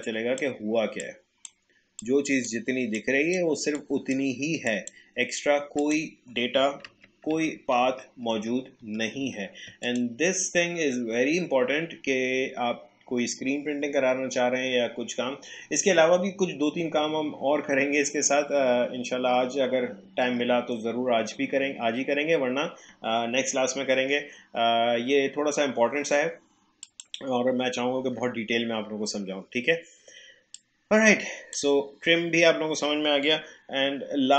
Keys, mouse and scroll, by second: 6.8 ctrl+z, 9.8 click, 26.8 click, 30.6-34.2 drag.